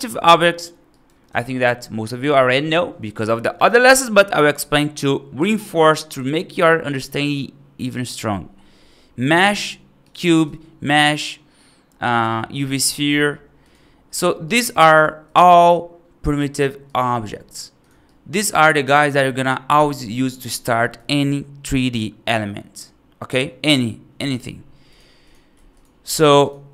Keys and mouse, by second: 0.7 right click, 1.2 shift+a, 10.3 shift+a, 12.9 g, 14.0 middle drag, 14.3 right drag, 14.9 shift+a, 17.1 g, 17.9-18.2 right drag, 18.7 right click, 20.8 x, 25.1 click, 25.4 x, 25.9 click, 26.1 x.